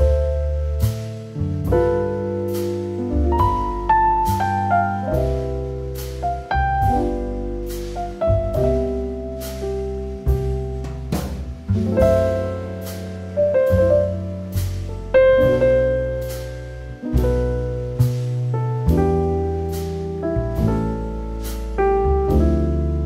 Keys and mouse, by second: 0.6 Tab, 0.7 Tab, 1.3 3, 1.4 click, 2.8 shift+middle click, 4.7 click, 6.2 click, 6.5 ctrl+z, 7.3 2, 7.6 click, 8.2 ctrl+b, 10.9 r, 12.4 click, 13.0 ctrl+r, 14.9 ctrl+click, 15.6 click, 17.0 click, 17.1 click, 17.8 click, 18.7 Tab, 19.4 alt+middle click, 20.3 Tab, 21.1 Tab, 21.3 Tab, 21.6 click, 22.4 Tab.